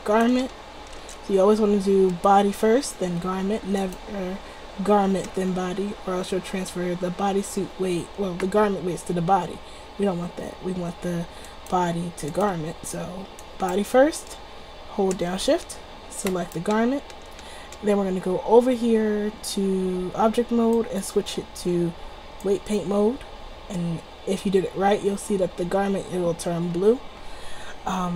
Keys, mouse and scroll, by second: 0.0-1.5 drag, 1.5-4.0 right drag, 4.0-5.4 drag, 5.4-10.3 right drag, 11.6-19.1 drag, 19.3 middle click, 23.4 middle click.